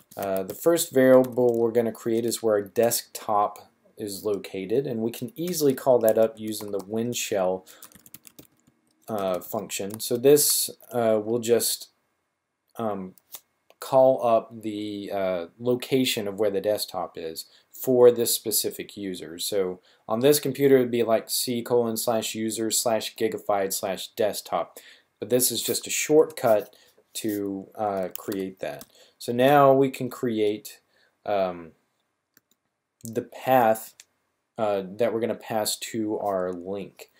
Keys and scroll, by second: 0.0-1.5 typing, 2.6 typing, 5.8-6.7 typing, 7.8-10.2 typing, 27.7-28.7 typing, 29.8 typing.